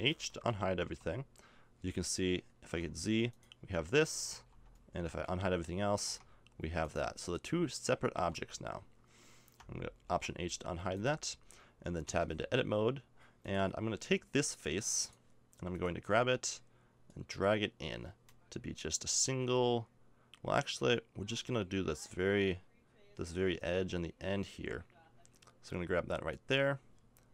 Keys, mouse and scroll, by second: 0.3 alt+h, 0.8 Tab, 2.6 z, 3.3 click, 4.3 alt+h, 5.1 a, 6.0 Tab, 6.8 right click, 8.2 h, 10.1 alt+h, 10.7 a, 12.0 Tab.